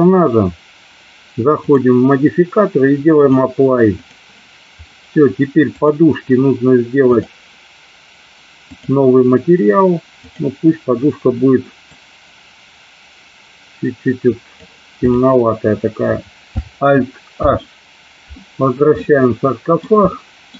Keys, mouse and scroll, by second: 1.6 click, 3.3 click, 5.7 click, 8.7 click, 10.2 click, 15.1 click, 17.5 alt+h, 19.0-19.9 middle drag, 20.1-20.5 shift+middle drag.